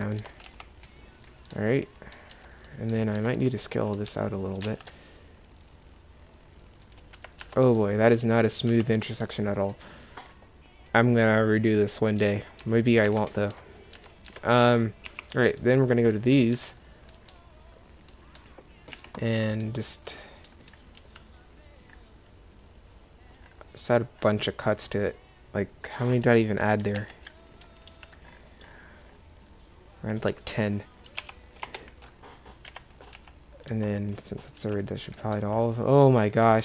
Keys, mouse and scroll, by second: 0.3 Tab, 0.6 z, 2.4 Tab, 3.3 Tab, 4.2 s, 7.2 Escape, 7.5 Tab, 8.3 z, 8.8 z, 12.3 Tab, 12.7 Tab, 13.2 Tab, 13.6 a, 14.0 Tab, 14.4 Tab, 15.2 2, 16.6 Tab, 19.0 a, 21.1 ctrl+r, 27.0 ctrl+z, 28.0 ctrl+r, 33.2 a, 33.8 Tab, 34.7 1.